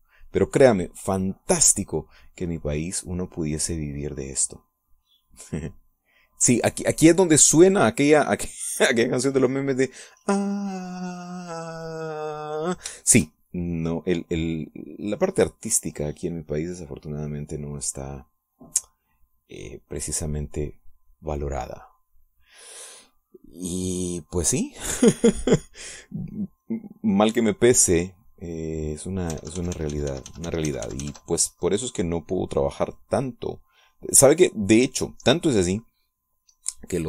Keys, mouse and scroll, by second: 0.8 click, 3.4-5.3 drag, 5.9-11.1 drag, 11.9-14.0 drag, 14.1 shift+click, 14.5-19.4 shift+drag, 20.2-23.5 drag, 24.1-26.7 drag, 28.7-29.9 drag, 30.1 click, 30.7 ctrl+z, 32.5-36.7 ctrl+drag.